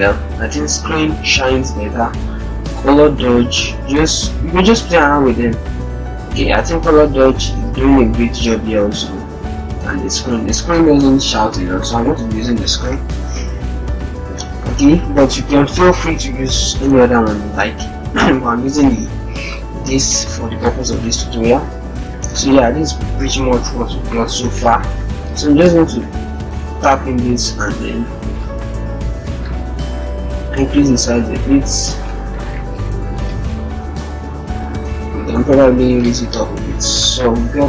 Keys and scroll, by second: 13.1 ctrl+-, 13.9 ctrl+0, 14.6 ctrl+-, 20.7 ctrl+0, 21.6 ctrl+-, 25.4 ctrl+t, 27.9 ctrl+z, 33.1 alt+shift+Up, 33.8 alt+shift+Up, 34.3 alt+shift+Up, 35.3 alt+shift+Up, 35.8 alt+shift+Down.